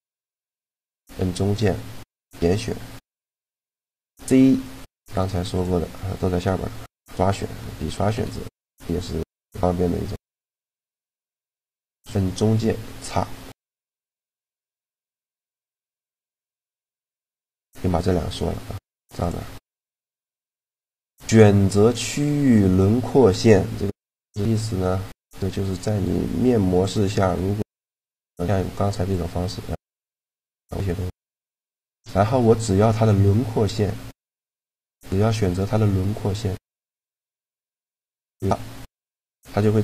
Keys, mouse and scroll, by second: 0.9 b, 1.9 b, 3.8 a, 5.3-6.9 drag, 7.4 click, 7.9 c, 15.6 right click, 15.9 middle click, 18.8 click, 19.1 click, 19.2 middle click, 19.8 click, 25.0-26.5 middle drag, 26.5-28.3 drag, 27.5 c, 28.3 middle click, 31.4 right click, 31.7-33.3 middle drag, 36.4-38.2 drag, 38.5-39.8 middle drag.